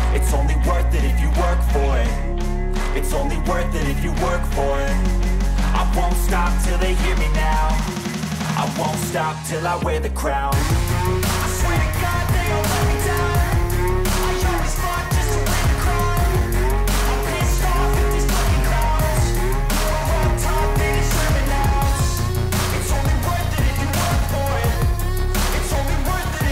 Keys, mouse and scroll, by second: 0.3 click, 0.4 click, 0.9 click, 1.0 click, 2.3 click, 2.4 click, 3.1 click, 3.7 click, 5.8 click, 6.9 click, 11.8 s, 12.7 click, 14.8 click, 16.1 click, 16.7 s, 18.2 click, 19.6 click, 21.6 click, 23.4 click, 23.8 click, 25.4 click.